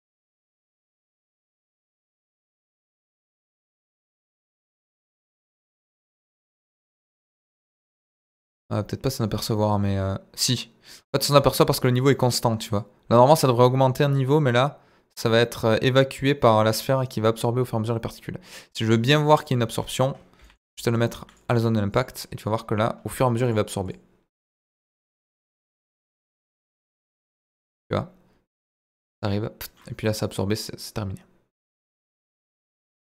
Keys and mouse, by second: 11.6-12.0 middle drag, 12.7-18.8 drag, 19.4 click, 20.4 g, 20.4 middle click, 21.3 click, 23.6 click, 23.8-27.0 drag, 27.8-33.0 drag.